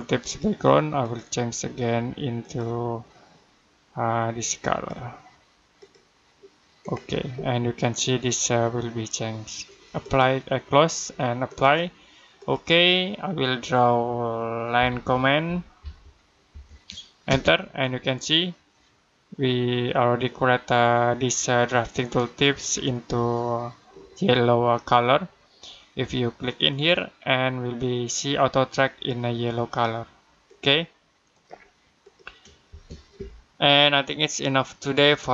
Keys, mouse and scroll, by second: 0.1 click, 9.9 click, 14.4-17.1 typing, 26.6 click, 30.3 click, 32.5 space.